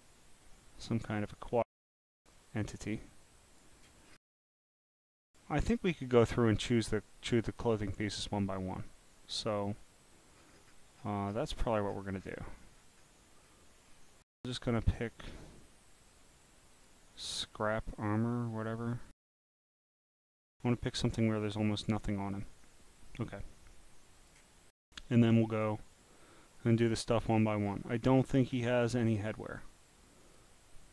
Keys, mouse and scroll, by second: 0.8 click, 1.9 click, 3.5 click, 4.6-5.1 scroll down 4, 6.2 click, 6.8 scroll down 5, 7.6 scroll down 1, 10.4 scroll, 11.0-11.8 scroll, 11.7 scroll up 1, 11.9 scroll, 12.0 scroll, 12.2 scroll, 12.3 scroll, 12.6 scroll, 13.0 scroll, 13.0 scroll, 13.1 scroll, 13.5-14.0 scroll, 16.7 click, 17.4 click, 22.3 click, 23.2-24.3 drag, 25.5 click, 26.6 click, 27.6 scroll, 28.2-29.0 scroll, 29.2 scroll down 2, 30.2 click.